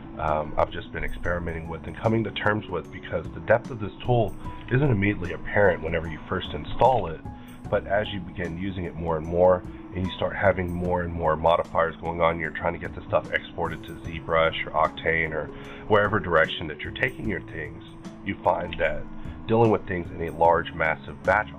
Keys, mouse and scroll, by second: 0.3-3.6 middle drag, 1.9-3.9 drag, 3.9 middle click, 4.4 scroll up 1, 4.5 q, 5.6 shift+click, 6.5 shift+double click, 6.8 scroll down 1, 6.9 alt+a, 7.1 middle click, 7.8 click, 8.3-10.2 drag, 10.2 middle click, 11.1 q, 12.8-15.8 drag, 15.8-21.4 middle drag, 18.6 alt+a.